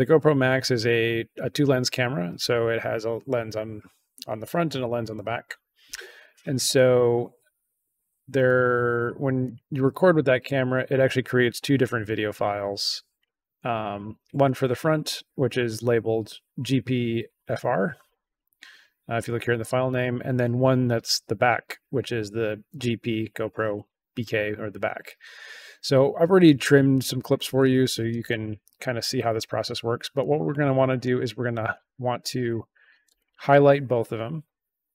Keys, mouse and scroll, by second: 8.4 click, 8.9 click, 9.4 click, 10.0 click, 13.1 click, 30.1 click, 30.9-31.6 drag, 33.1 shift+click.